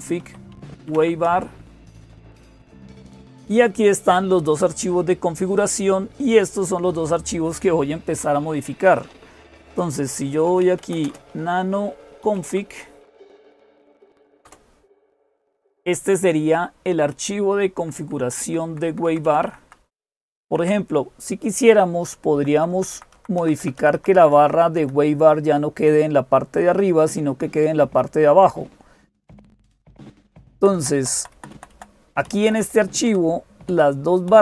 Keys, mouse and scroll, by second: 0.0-34.4 typing, 17.6 Down, 17.8 Down, 18.0 Down, 18.2 Down, 18.5 Down, 18.9 Down, 19.1 Down, 19.2 Down, 19.4 Down, 19.6 Down, 19.8 Down, 20.2 Down, 20.4 Down, 22.1 Up, 22.3 Up, 22.5 Up, 22.7 Up, 22.9 Up, 23.4 Up, 23.4 Up, 23.6 Up, 23.8 Up, 23.9 Up, 24.1 Up, 24.3 Up, 28.8-29.8 Right, 30.3 Left, 30.6 Left, 30.8 Left, 31.0 Left, 31.2 Left, 31.5 Left, 32.0 Up, 32.2 Up, 32.4 Up, 32.9 Down, 33.5 Right, 34.1 Left.